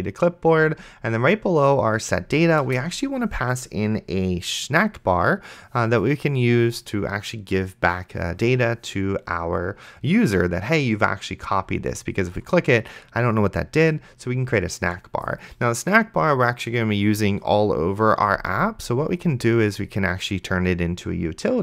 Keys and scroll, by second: 2.9 Return.